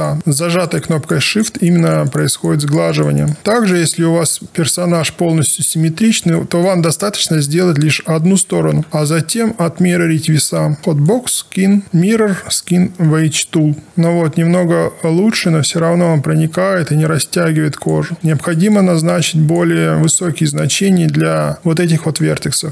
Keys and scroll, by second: 8.9 space, 18.1 ctrl+z.